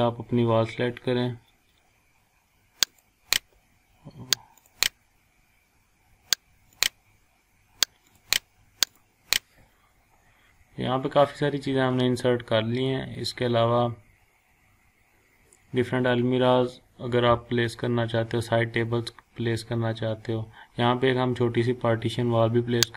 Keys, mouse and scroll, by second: 2.9 click, 9.5 scroll down 1, 10.5 scroll up 1, 11.6 scroll down 1, 12.6 scroll up 1, 13.3 scroll down 1, 13.8-14.3 scroll up 1, 14.8 scroll down 1, 18.7 scroll down 1, 19.6 scroll up 1.